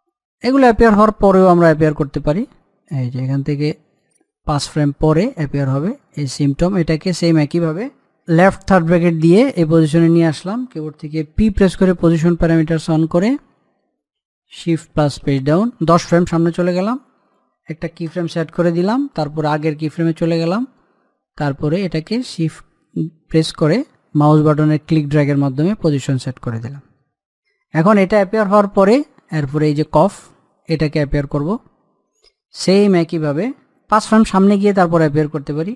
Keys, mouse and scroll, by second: 4.8 scroll up 1, 5.1 middle click, 6.0 click, 6.9-7.6 scroll down 1, 8.4-8.8 scroll up 1, 9.3 l, 11.4 p, 12.6 click, 15.2 shift+Page_Down, 17.3 click, 20.8-22.1 middle drag, 22.1-27.8 shift+drag, 29.6 click.